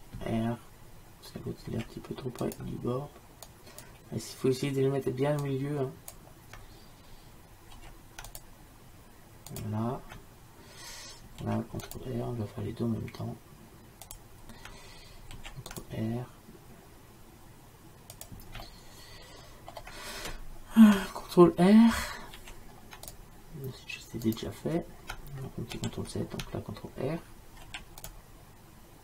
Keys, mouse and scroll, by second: 1.7 ctrl+r, 5.5-7.8 drag, 7.8 ctrl+r, 11.5 ctrl+r, 15.4 ctrl+r, 18.7 middle click, 19.6-22.4 middle drag, 22.4 ctrl+r, 25.9 ctrl+z, 27.7 ctrl+r.